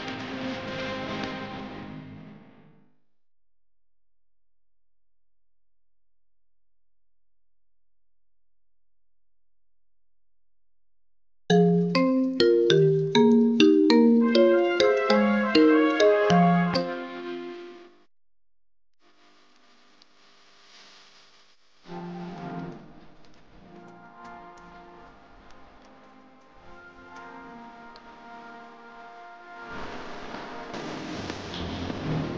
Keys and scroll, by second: 8.5 ctrl+q.